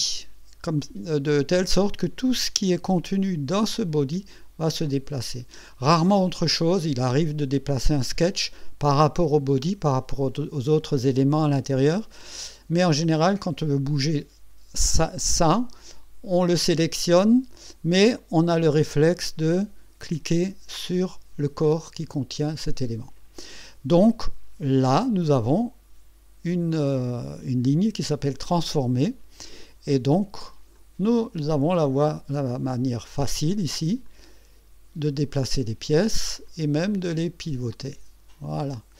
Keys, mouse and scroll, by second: 7.8 click, 17.2 click, 20.9 click, 25.0 right click, 28.5 click, 30.8-33.5 drag, 34.1-35.6 drag, 36.5-38.9 drag.